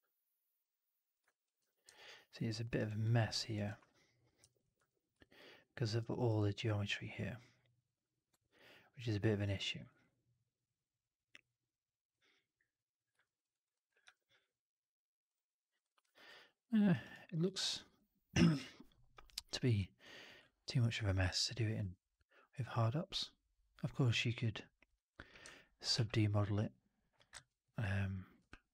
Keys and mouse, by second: 1.2 click, 1.5 4, 1.8 alt+right drag, 2.0 alt+drag, 2.4 alt+middle click, 2.5 alt+right click, 2.7 click, 3.0 middle click, 3.4 click, 4.3 4, 4.5 click, 4.7 1, 5.1 alt+click, 5.7 alt+right click, 6.0 alt+right click, 6.3-9.3 alt+drag, 9.5 alt+middle click, 9.7 alt+right click, 9.9-12.0 alt+drag, 13.1 alt+middle click, 13.4 alt+right click, 13.6 alt+click, 13.9 4, 16.0 alt+click, 16.7 alt+middle drag, 16.8 alt+right click, 17.0 alt+right click, 17.2 alt+drag, 17.5 alt+middle drag, 17.7 alt+right click, 17.9-18.8 alt+drag, 19.0 alt+right drag, 19.2-19.6 alt+drag, 20.0-20.3 drag, 20.3-21.0 alt+drag, 21.1 w, 21.7 r, 23.0-25.2 drag, 25.2 w, 25.4 alt+click, 25.8 r, 27.3 ctrl+z, 28.3 w.